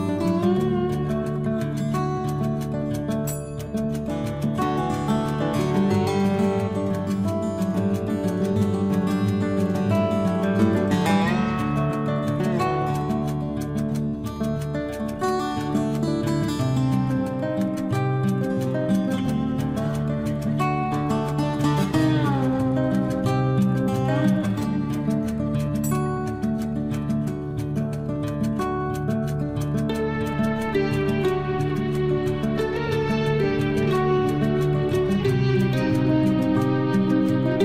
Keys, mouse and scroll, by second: 1.8 click, 3.9 Escape, 6.9 click, 9.0 9, 9.4 Return, 10.0 space, 10.3-11.8 scroll up 1, 11.8 click, 12.2-13.0 scroll up 1, 13.0 click, 13.9 space, 14.9 click, 16.0 Delete, 16.9 click, 17.3 Delete, 18.2 scroll down 1, 19.3 click, 19.3 click, 19.6 Delete, 20.4 click, 20.7 Delete, 21.8 click, 22.1 Delete, 22.6-24.6 scroll down 1, 26.1-26.8 scroll up 1, 26.8-27.5 scroll down 1, 27.5 t, 28.1 click, 29.8-31.0 typing, 31.8 Return, 33.9 click, 35.2 9, 35.5 Return.